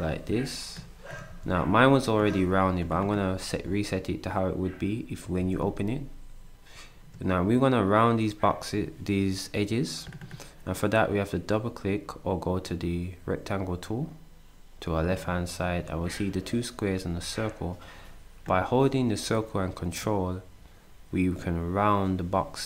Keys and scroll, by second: 1.3 s, 5.2 s.